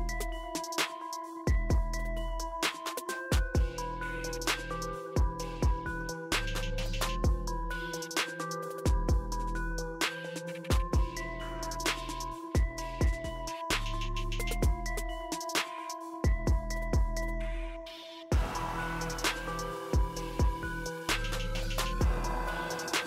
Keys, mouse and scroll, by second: 2.9 click, 2.9 typing, 6.6 click, 6.6 typing, 8.3 typing, 9.3 click, 9.3 typing, 13.7 click, 16.3-16.8 drag, 21.4 click.